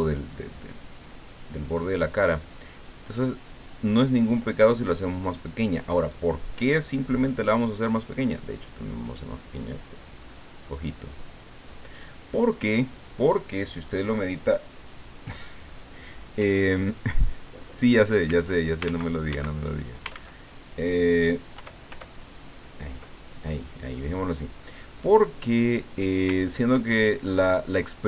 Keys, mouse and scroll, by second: 0.8-2.1 drag, 3.7-6.4 drag, 7.8-9.4 drag, 10.0-12.1 drag, 16.7-18.1 drag, 18.8 ctrl+z, 20.1 ctrl+z, 21.5 ctrl+y, 23.5 click, 25.2 click, 26.6-28.0 ctrl+drag.